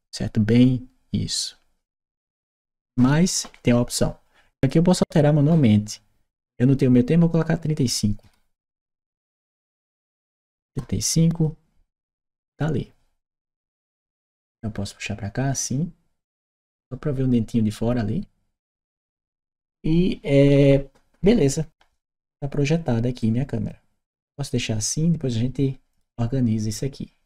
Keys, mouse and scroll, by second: 5.3 click, 10.5 Return, 11.1 click, 13.9-19.0 drag, 23.0-25.8 drag.